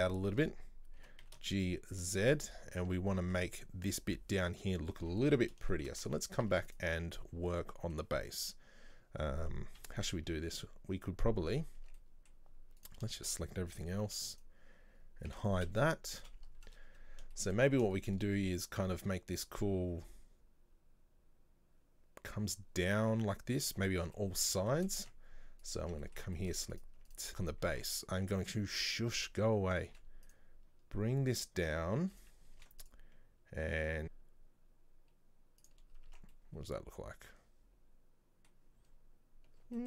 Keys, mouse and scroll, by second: 0.1 middle click, 1.1 g, 2.3-2.6 scroll down 2, 2.6 middle click, 2.9 Tab, 3.2-4.9 middle drag, 4.9 scroll up 2, 5.1 Tab, 5.3 middle click, 6.1 Tab, 6.5 Tab, 6.7 right click, 7.7-9.8 middle drag, 9.8 KP_3, 11.5 scroll down 2, 11.8 Tab, 12.0-12.8 middle drag, 12.8 right click, 13.2-13.8 shift+middle drag, 13.8-14.1 scroll down 1, 14.1 b, 15.7 KP_1, 16.7 scroll up 1, 17.4 shift+middle drag, 17.7-18.0 scroll up 2, 18.0-21.0 shift+middle drag, 23.9-25.1 shift+middle drag, 25.1 Tab, 25.7 right click, 25.9 Tab, 26.1 middle click, 26.8 right click, 27.1 right click, 27.3-27.7 scroll up 2, 27.7 Tab, 29.9 ctrl+r, 32.6 ctrl+r, 34.8 ctrl+b, 36.0 scroll down 2, 36.2 Tab, 36.5-38.9 middle drag, 38.9-39.6 scroll down 1.